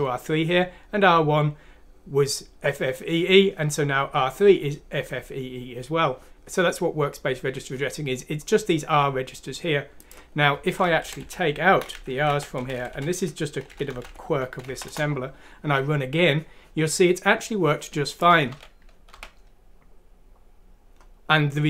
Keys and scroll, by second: 11.0 Left, 11.2 Left, 11.6 Right, 11.9 Delete, 12.1 Down, 12.3 Delete, 12.9 Left, 13.7 Delete, 13.8 Up, 14.7 F6, 14.9 Return, 18.5-19.1 typing.